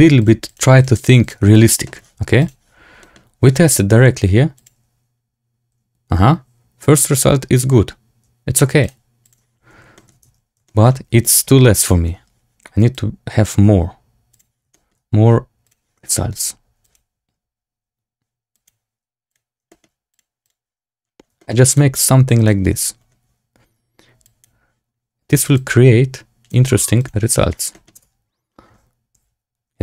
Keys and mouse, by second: 0.1 click, 0.4 click, 1.7 shift+middle click, 2.6-3.0 drag, 8.8-9.7 drag, 9.9 shift+click, 10.2 Tab, 10.6 shift+click, 11.7 Tab, 12.8 shift+click, 14.3 click, 14.6 shift+middle click, 15.7 click, 16.0 shift+middle click, 16.8 click, 19.2 click, 19.6 shift+middle click, 20.0 click, 20.3 click, 21.3 shift+click, 21.6 click, 22.3 click, 24.2 click, 25.5 click, 27.0 click, 27.6 middle click, 27.9 space, 29.3 z.